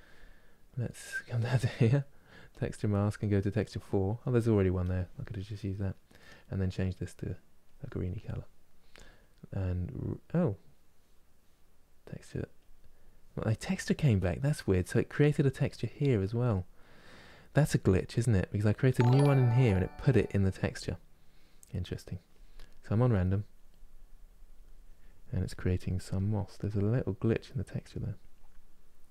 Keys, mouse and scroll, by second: 2.3-7.7 drag, 7.7-16.1 middle drag, 16.1-25.4 drag, 25.4-26.9 middle drag, 26.9-29.1 drag.